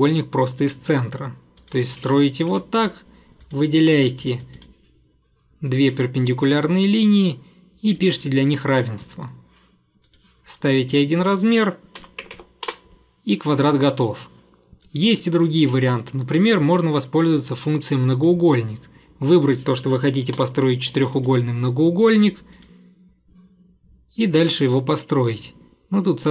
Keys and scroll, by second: 2.5 Escape, 11.8-12.9 typing, 13.6 Escape, 15.6 Delete, 16.6 Delete, 20.4 4.